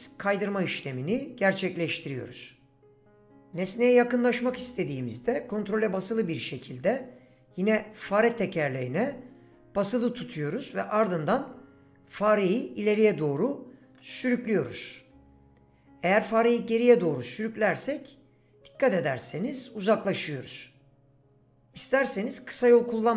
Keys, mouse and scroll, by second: 10.1 ctrl+middle click.